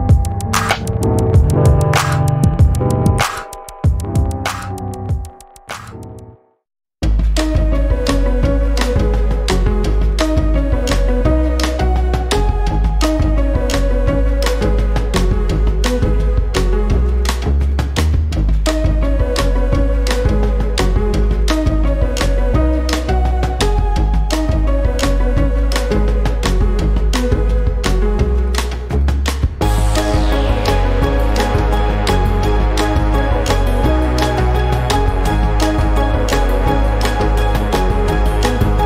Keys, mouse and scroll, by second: 0.6 ctrl+d, 1.6-3.1 shift+drag, 3.2 shift+click, 5.0 ctrl+KP_Subtract, 6.7 ctrl+shift+k, 8.3 click, 9.2 click, 10.8 click, 11.7 click, 12.7 click, 15.4 shift+click, 16.4 click, 17.3 click, 18.5 click, 19.7 shift+click, 20.9 click, 21.4-24.6 drag, 25.4 click, 27.4 click, 28.2 ctrl+d, 29.4 click, 30.6 click, 32.2 ctrl+d, 33.5 click, 36.0 KP_5, 37.7 click.